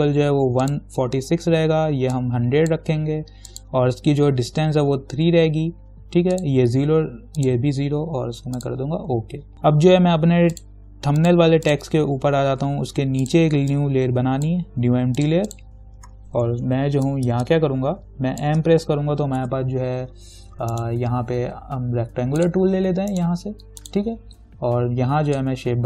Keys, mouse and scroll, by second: 2.7-3.7 drag, 6.5 click, 9.8-10.8 scroll up 2, 10.8-15.4 drag, 14.2-15.4 drag, 16.9 ctrl+=, 17.5 space, 17.7 click, 18.1 space, 18.6 space, 19.6 m, 20.9 right click, 22.6 click, 23.3 right click, 24.0-25.8 drag.